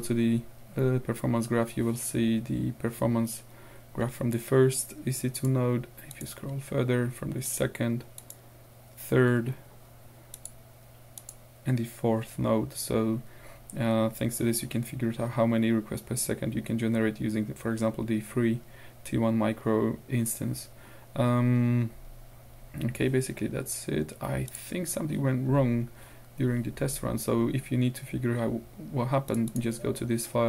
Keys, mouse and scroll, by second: 5.4 click, 5.5 middle click, 6.1 click, 6.3 middle click, 6.4 click, 7.5 click, 7.7 middle click, 8.2 click, 9.4 scroll down 2, 9.7-10.4 scroll up 2, 10.4 click, 11.2 click, 14.1-15.7 scroll down 2, 20.9-21.5 scroll up 2, 24.5 click, 29.3 click.